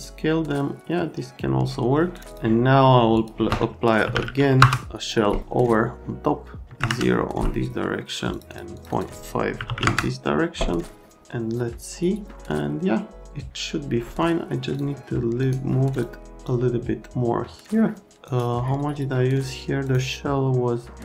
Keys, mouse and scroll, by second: 0.0 middle click, 2.3 middle click, 3.1 middle click, 3.8-5.3 typing, 6.7 KP_0, 6.8 KP_Enter, 8.3 click, 8.5 click, 8.7 click, 8.9 click, 9.6 KP_Decimal, 9.7 KP_5, 16.5 right click, 18.2 right click, 19.8 right click.